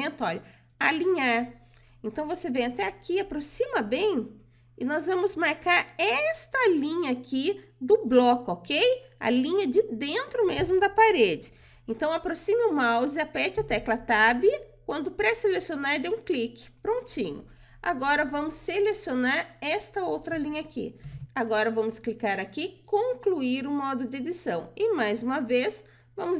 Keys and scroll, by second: 13.1 Tab.